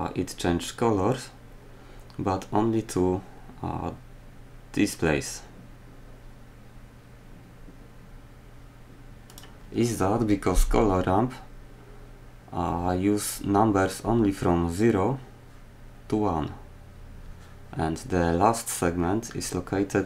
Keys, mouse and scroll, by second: 4.3 typing.